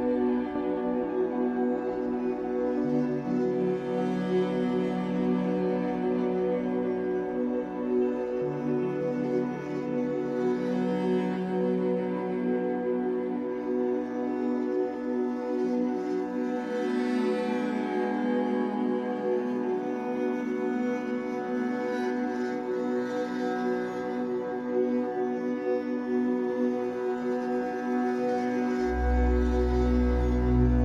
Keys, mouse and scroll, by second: 1.9-2.9 shift+middle drag, 2.9 click, 6.0-14.3 middle drag, 6.5 Tab, 6.8-7.5 scroll down 4, 7.9-8.2 scroll up 2, 8.5 scroll down 1, 9.0-9.7 scroll up 2, 9.9 scroll up 1, 10.4 Tab, 11.4 scroll up 1, 14.3 click, 17.2 click, 19.5 scroll down 2, 19.7-25.6 middle drag, 20.1 Tab, 20.2-20.9 scroll down 4, 22.8 ctrl+s, 23.2 scroll down 2, 26.0-30.8 middle drag, 27.2 scroll up 2, 28.0-28.4 scroll up 2, 28.9 scroll down 2, 30.3 KP_1.